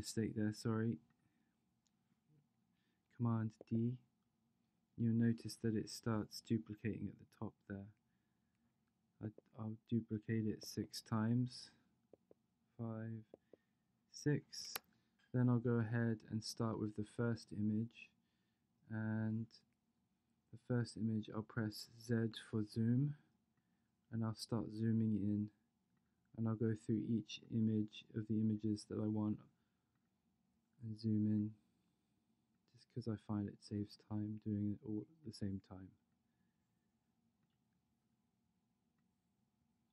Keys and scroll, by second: 13.4 super+d, 22.3 z.